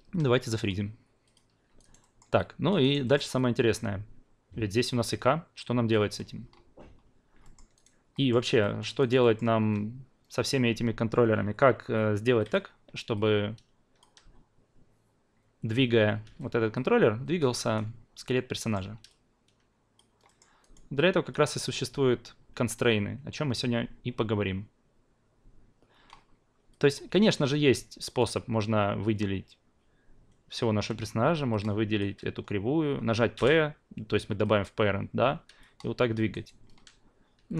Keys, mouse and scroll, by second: 0.7 click, 1.3 click, 1.7 alt+right click, 2.0 alt+middle click, 2.3-2.8 alt+drag, 2.8 alt+right drag, 3.0-3.3 alt+middle drag, 3.3-7.3 alt+drag, 7.4 alt+middle click, 7.7 alt+right click, 8.1 alt+middle click, 8.6 alt+middle click, 9.0 alt+right drag, 9.2 alt+middle drag, 12.4 drag, 13.1-14.0 alt+drag, 16.2 w, 16.8-17.7 drag, 18.6 alt+middle drag, 19.3 alt+click, 20.2 alt+middle click, 20.6 alt+right click, 20.9-21.3 alt+drag, 26.7 alt+click, 28.0 click, 31.5-32.0 shift+drag, 33.3 p, 34.4-36.3 drag, 36.3 alt+right click.